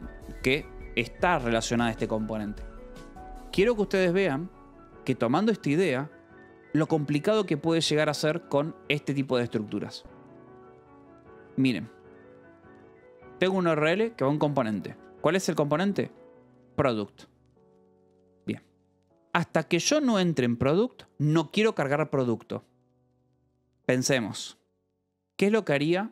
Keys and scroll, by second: 1.9-2.8 typing, 8.9 j, 9.7 j, 10.1 Escape, 11.7 k, 13.8 shift+v, 14.8 Escape, 15.9 j, 17.2 shift+v, 18.1 Escape.